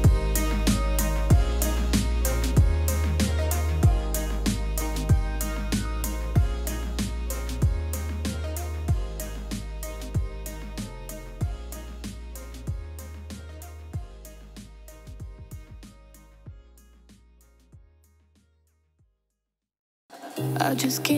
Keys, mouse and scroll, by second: 6.2 Return, 8.2 Return, 14.3 Return, 14.4 click, 17.4 Return.